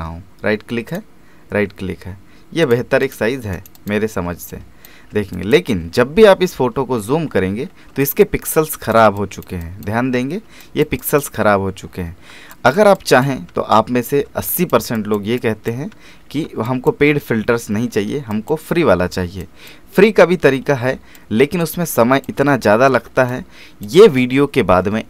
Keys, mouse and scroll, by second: 0.9 click, 3.3 space, 3.5 right click, 3.7 click, 3.8 space, 4.5 ctrl+click, 5.9-6.4 alt+scroll up 1, 7.2 alt+scroll up 1, 8.0 click, 10.2 alt+scroll up 1, 10.6 click, 11.4-11.8 scroll down 1, 11.9-12.3 alt+scroll down 3, 12.5 click, 13.6-14.1 alt+scroll down 1, 14.1-14.5 alt+scroll up 1, 14.5 click, 16.2-16.5 alt+scroll up 1, 16.7 click, 17.2-17.8 alt+scroll down 1, 18.3 click, 18.7 alt+scroll down 1, 19.4 click, 20.6 alt+scroll down 1, 21.1 click, 22.0 click, 22.7-23.1 alt+scroll down 1, 23.3-25.0 drag.